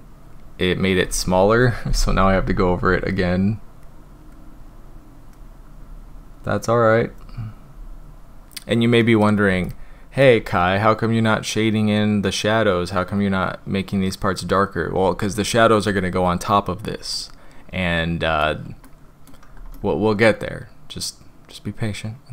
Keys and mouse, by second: 2.3 ], 2.8 ], 3.5-5.3 drag, 5.8-7.2 drag, 7.7-8.4 drag, 9.0 middle click, 9.6 shift+middle click, 17.2-18.4 middle drag, 18.8-19.3 shift+middle drag, 19.7-22.3 middle drag.